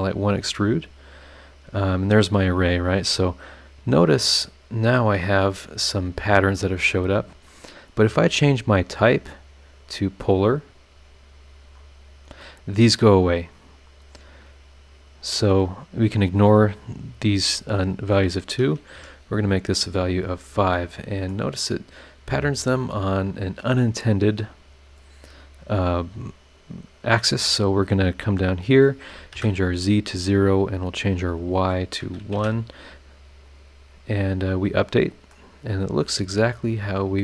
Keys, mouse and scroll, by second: 2.4 click, 4.0-5.0 scroll up 4, 6.8 scroll down 2, 8.8 click, 9.3 click, 10.1 click, 11.2 scroll down 2, 11.8 click, 12.4 scroll up 2, 14.1 click, 16.0 scroll down 2, 17.8 click, 18.9 KP_5, 20.3 click, 20.6-21.2 scroll down 4, 21.3-23.8 middle drag, 21.3-23.8 right drag, 24.6-25.1 scroll down 4, 25.1-25.7 scroll up 4, 27.3 click, 28.5 click, 29.3 KP_0, 31.3 click, 32.3 KP_1, 33.4 click, 34.0 scroll down 1, 34.7 scroll up 1, 35.3-37.2 middle drag, 35.3-37.2 drag, 35.3-37.2 right drag.